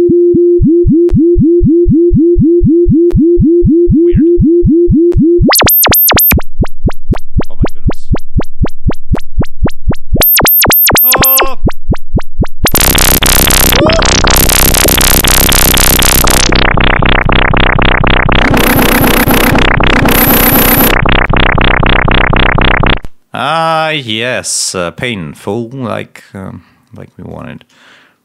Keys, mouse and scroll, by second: 4.6 click, 5.3-7.1 drag, 7.7 click, 8.9 click, 10.0 click, 11.2 click, 12.4 click, 13.6-15.2 drag, 15.9-17.2 drag, 22.8 space, 24.6 click, 25.7-26.4 scroll down 1, 27.2 click.